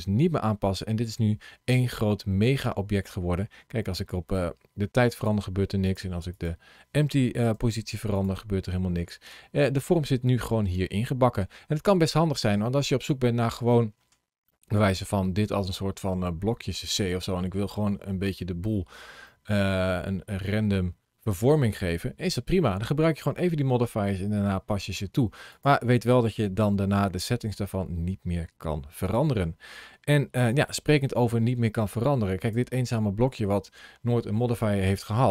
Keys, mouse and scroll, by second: 0.1-0.9 scroll down 1, 0.9-1.9 scroll up 1, 1.9 middle click, 4.2 click, 5.7 click, 7.4 g, 8.0 click, 8.8 middle click, 10.0 scroll up 2, 10.6 middle click, 19.1 middle click, 23.1 scroll down 2, 23.8 middle click, 25.3 click, 26.6 g, 28.9 right click, 30.5 shift+middle click, 32.2 click, 35.2 scroll up 2.